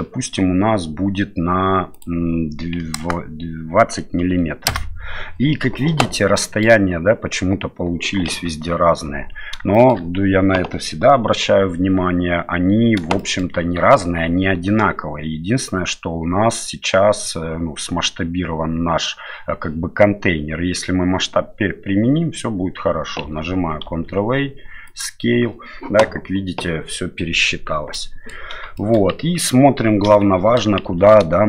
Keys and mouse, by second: 1.9-5.3 drag, 6.3-6.6 middle drag, 8.3 KP_7, 9.7 shift+middle drag, 13.2-13.5 shift+middle drag, 23.9 ctrl+a, 27.9-28.3 middle drag, 28.8 shift+middle drag, 30.1 KP_7, 30.8 shift+z.